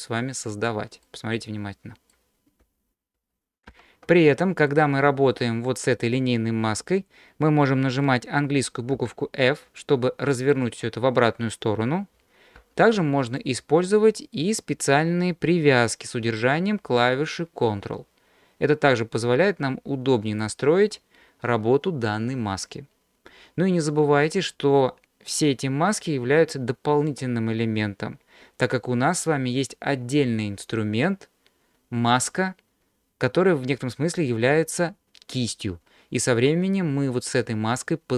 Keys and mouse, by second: 1.0-2.1 middle drag, 3.2 ctrl+z, 3.7 ctrl+z, 4.6-10.5 drag, 12.6 ctrl+z, 13.5-20.4 drag.